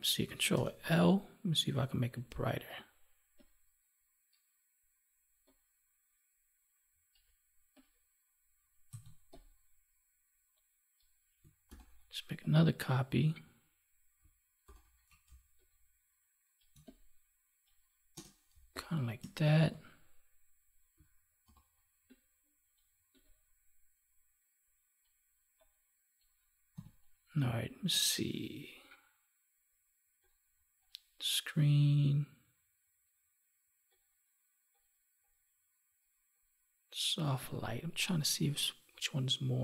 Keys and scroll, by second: 0.4 ctrl+l, 11.6 ctrl+j, 14.6 ctrl+t, 18.4 space, 19.5 ctrl+s, 21.4 ctrl+j, 26.7 Delete.